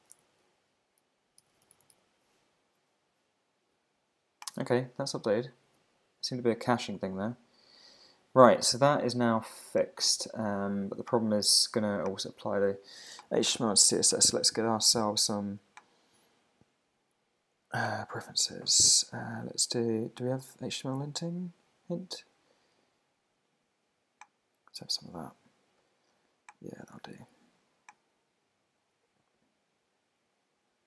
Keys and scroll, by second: 1.5 super+f, 2.7 Return, 5.7 super+`.